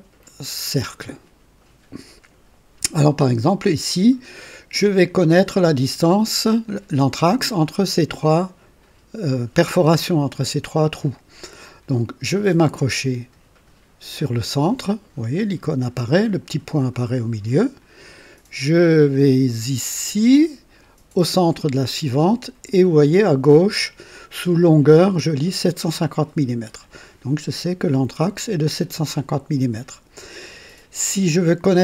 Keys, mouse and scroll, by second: 17.5 click.